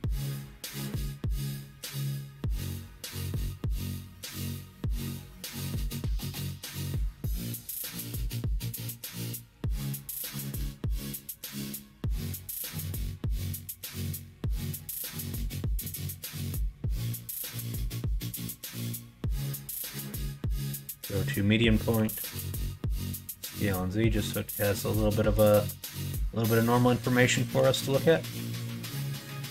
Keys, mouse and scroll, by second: 0.9 2, 1.4 click, 2.9 shift+click, 3.8 f, 4.1 3, 4.7 alt+click, 5.5 alt+click, 6.5 2, 6.9 alt+click, 7.8 f, 8.3 alt+click, 9.4 f, 11.0 3, 11.2 click, 11.6 shift+click, 12.3 shift+click, 12.6 middle click, 14.0 e, 17.4 2, 17.7 click, 19.3 shift+click, 21.9 s, 25.6 middle click, 26.0 middle click, 26.4 scroll up 1, 26.6 middle click, 26.9 shift+middle click, 27.6 scroll up 1, 27.8 shift+middle click, 27.8 shift+right click, 28.2 middle click, 28.8 middle click.